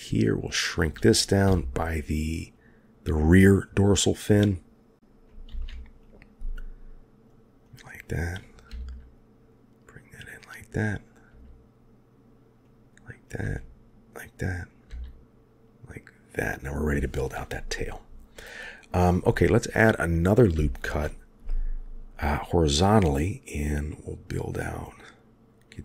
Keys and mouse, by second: 0.2 click, 1.4 g, 5.4 ctrl+r, 7.6 click, 8.6 g, 10.8 click, 11.2 g, 13.1 click, 13.3 g, 14.8 g, 20.5 ctrl+r.